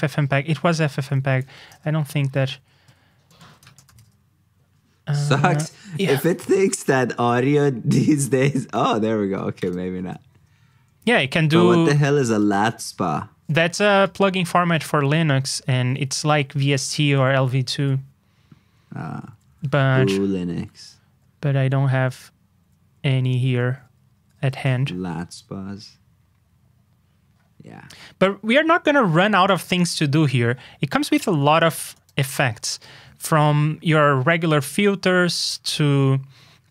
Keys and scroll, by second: 17.6 super+g.